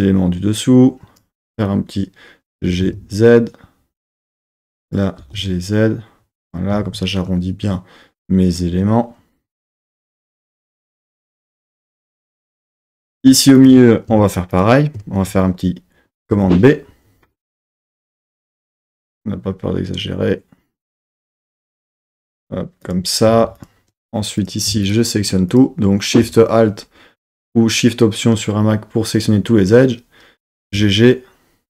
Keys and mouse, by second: 0.6 click, 2.5 g, 2.9 z, 4.5 click, 5.2 g, 5.4 z, 6.4 click, 6.7 z, 10.5 KP_3, 13.0 2, 13.6 click, 14.3 alt+shift+click, 14.5 alt+shift+click, 16.3 super+b, 22.8 click, 23.3 2, 23.6 click, 24.4 click, 24.9 alt+shift+click, 25.5 alt+shift+click, 30.6 g, 30.7 g.